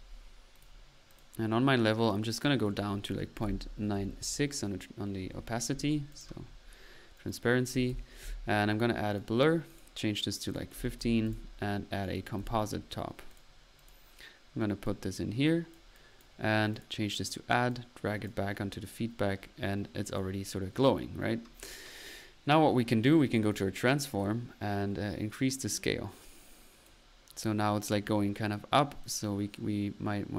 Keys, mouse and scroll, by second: 0.0-0.3 typing, 0.5 click, 1.1 click, 2.6 click, 6.1-6.5 drag, 7.1 click, 7.8-8.2 typing, 9.1 click, 9.7 click, 10.5-10.9 drag, 11.3-11.6 drag, 12.0 right click, 12.4 c, 13.3 right click, 13.4-13.7 drag, 13.8 drag, 14.8 click, 17.2 drag, 17.7 click, 18.8 middle click, 22.4-22.8 typing, 23.4-24.0 drag, 24.1-27.0 drag, 27.2 middle click, 29.0-30.3 drag.